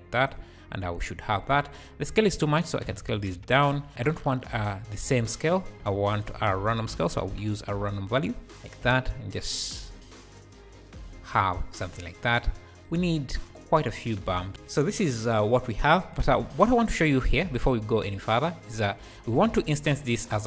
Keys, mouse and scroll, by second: 0.8 `, 3.0 click, 3.9 scroll up 2, 4.0 `, 5.9 shift+a, 8.5 click, 9.5-14.5 shift+drag, 14.5-15.9 scroll down 3, 17.2 alt+a, 17.8 scroll down 5, 18.7 click, 20.1 shift+right click, 20.3 shift+a.